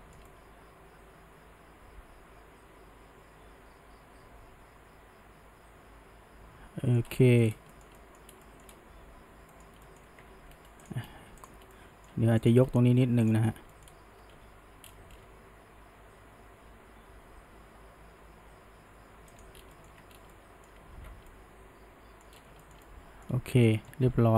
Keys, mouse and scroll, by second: 0.0-3.3 shift+middle drag, 7.1 scroll down 1, 7.2 middle click, 7.5 scroll up 1, 7.7-8.3 shift+middle drag, 8.3 scroll down 1, 8.5 middle click, 8.7-9.5 scroll up 1, 9.5-10.2 middle drag, 10.2 Tab, 10.9 click, 11.8-12.5 middle drag, 12.5 click, 13.3 shift+click, 13.7 middle click, 14.4 g, 19.5 scroll down 1, 19.8 middle click, 19.9 Tab, 20.2 scroll down 1, 20.3-20.9 middle drag, 20.9 alt+a, 21.3-22.4 middle drag, 22.4 scroll up 1, 22.6-24.0 shift+middle drag, 24.0 ctrl+s.